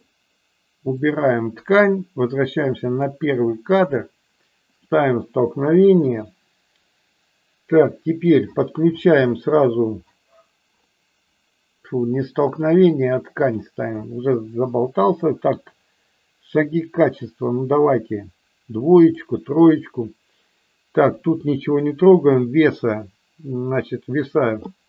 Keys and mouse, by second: 0.9 click, 2.8 click, 13.4 click, 15.2-19.2 drag, 21.8 click.